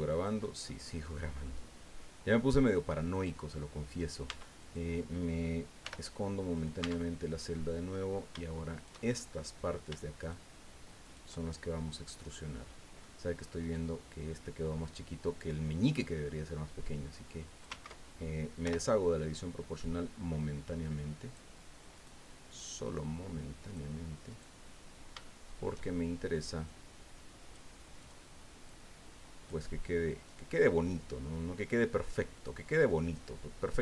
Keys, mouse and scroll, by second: 0.1 click, 0.6 click, 1.4 click, 2.3 scroll up 1, 3.1 right click, 4.3 Tab, 4.6 right click, 5.8 h, 6.5 right click, 6.8 Tab, 6.8 middle click, 7.5 click, 8.8 shift+right click, 9.0 shift+click, 10.2 shift+right click, 11.0 shift+right click, 11.4-11.7 shift+scroll down 2, 12.3 click, 13.6 right click, 16.8 click, 17.7 ctrl+z, 18.6 o, 19.8-21.5 drag, 21.9 right click, 22.8-23.9 drag, 24.3 right click, 25.2 shift+middle click, 26.7-27.7 drag, 28.0 right click, 28.7 click, 30.3 right click, 32.3 right click, 33.3 click.